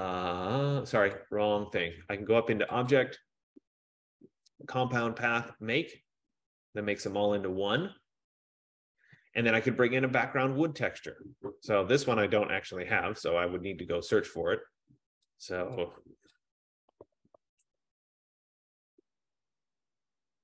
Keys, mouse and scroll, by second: 1.4 click, 3.2 click, 12.9 click, 13.9 click, 16.1 click, 17.1-20.4 typing, 20.0-20.4 drag.